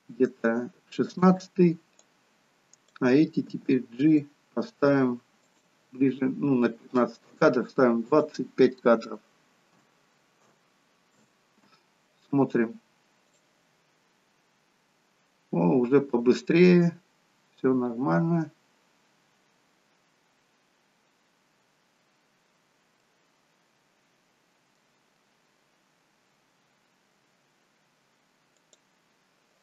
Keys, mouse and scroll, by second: 2.0 click, 3.6 g, 8.2 click, 13.3 click, 23.2 middle click, 28.7 click.